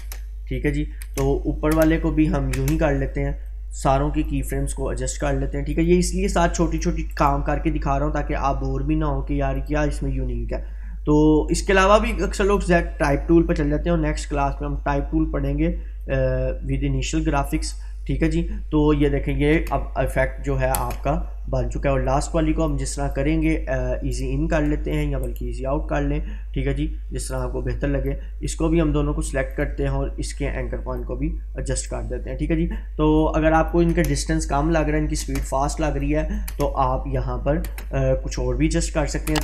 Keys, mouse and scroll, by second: 0.5-1.2 click, 1.0 space, 3.5-4.4 drag, 7.1 right click, 9.6-13.8 drag, 16.1-17.9 drag, 19.5 space, 22.1-22.7 drag, 25.3 right click, 27.3-28.7 drag, 33.9 space, 36.0-36.6 click, 36.5 space, 38.3-39.0 click, 39.3 space.